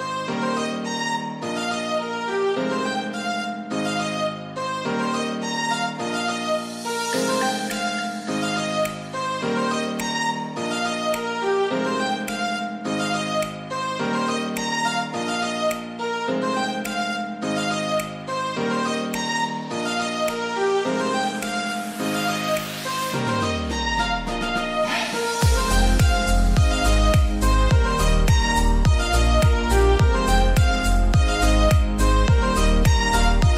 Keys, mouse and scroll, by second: 2.7 right click, 4.2-6.1 drag, 6.1 right click, 6.5 click, 6.9-9.3 drag, 9.3 right click, 10.6-11.3 scroll down 1, 11.3-12.6 scroll up 1, 12.6 click, 13.1 scroll down 1, 14.1 click, 14.1-15.9 drag, 15.9 scroll up 1, 17.3 scroll up 1, 18.8 click, 19.5-20.1 scroll down 1, 20.1-20.8 scroll up 1, 20.8 click, 21.6-23.0 scroll down 1, 23.0-23.7 scroll up 1, 23.7 click, 23.7-25.1 drag, 25.1 scroll down 1, 26.5 click, 28.1-28.8 scroll up 1, 28.8-30.6 drag, 30.0 typing, 30.6-33.5 scroll down 1.